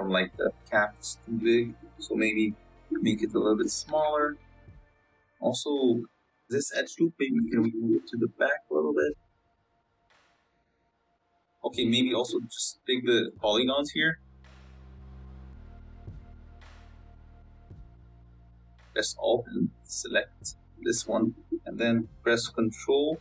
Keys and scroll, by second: 0.1 z, 3.6 s, 4.9 Tab, 8.7 g, 10.2 s, 11.5 Tab, 12.5 Tab, 14.1 s, 14.7 Tab, 15.7 Tab, 16.6 3, 22.4 ctrl+KP_Add.